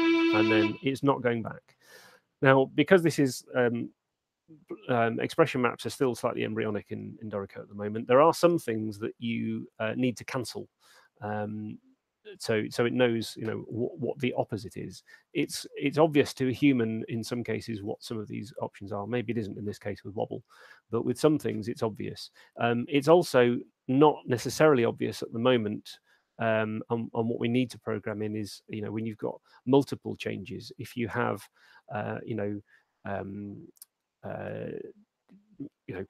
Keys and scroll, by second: 0.8 space.